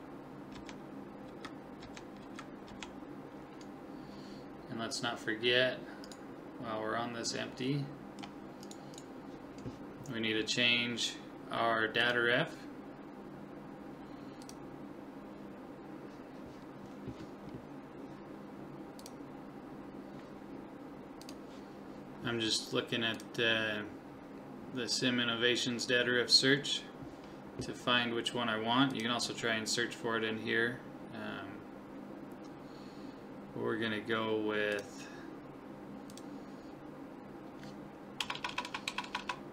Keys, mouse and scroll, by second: 0.6 Left, 1.3 Right, 1.8 Left, 2.2 Right, 2.7 Left, 4.9-7.9 right drag, 7.7-9.6 middle drag, 8.6-10.9 right drag, 12.0 click, 38.4 BackSpace, 38.5 BackSpace, 38.9 BackSpace, 39.2 BackSpace.